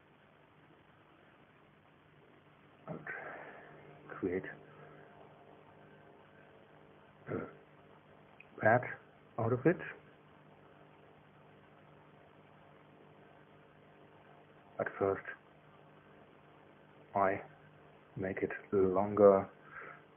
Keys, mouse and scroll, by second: 1.5 click, 3.3-12.8 middle drag, 5.7 KP_1, 6.5 KP_3, 14.6 KP_1, 15.5 KP_3, 18.3 KP_2, 20.0 KP_1.